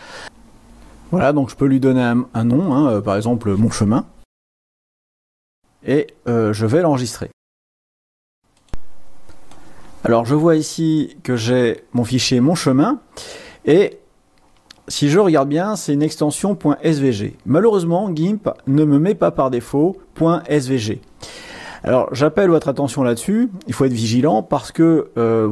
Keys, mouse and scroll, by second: 0.5 click, 3.2-4.2 drag, 4.2-5.7 typing, 7.6 click, 8.7 click, 9.5 click, 10.6 click, 10.7 click, 12.1 click, 14.8-19.1 drag, 21.3-24.7 drag.